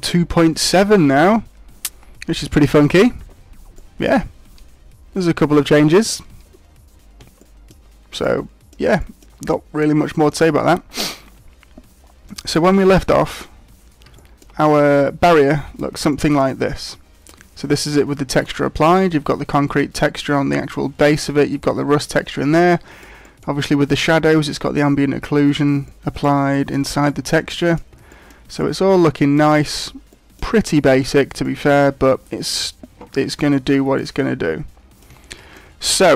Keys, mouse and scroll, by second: 3.8 shift+middle click, 7.4 shift+middle click, 8.2 middle click, 9.0 shift+middle click, 9.5 middle click, 10.1 shift+middle click, 12.2 click, 14.2 shift+middle click, 14.9 middle click, 16.1 shift+middle click, 22.4 middle click, 23.2 shift+middle click, 25.8 middle click, 26.5 shift+middle click, 27.0 middle click, 28.1 shift+middle click, 28.6 middle click, 29.6 shift+middle click, 30.1 shift+middle click, 30.8 middle click, 31.4 shift+middle click, 34.0 middle click, 35.3 shift+middle click, 35.8 middle click.